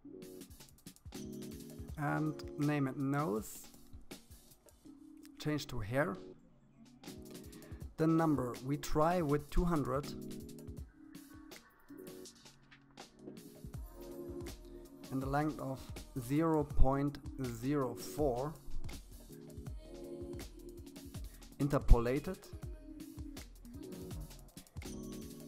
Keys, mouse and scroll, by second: 2.0 click, 4.4-5.6 scroll down 1, 5.6-7.1 drag, 7.2 0, 13.3-14.8 drag, 18.2-21.5 scroll down 14, 21.5 click, 22.4-24.4 scroll down 10, 24.4-25.4 drag.